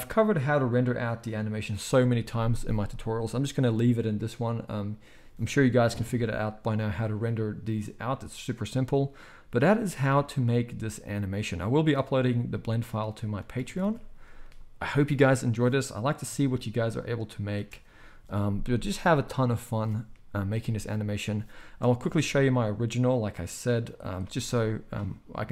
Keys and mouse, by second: 0.3-1.0 middle drag, 1.0 click, 1.1-11.3 middle drag, 11.3-13.2 drag, 13.4 ctrl+s, 13.7 ctrl+s, 13.8 ctrl+s, 16.2 z, 16.9-18.3 drag, 16.9-18.3 right drag, 17.5 space, 22.0 space.